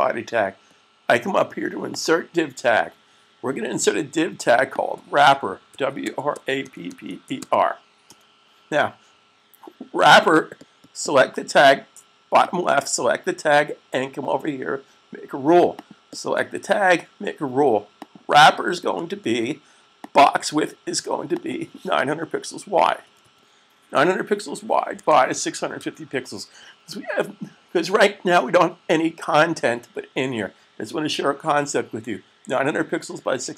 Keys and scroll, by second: 5.5-7.4 typing, 22.6-23.0 typing, 25.4-26.4 typing.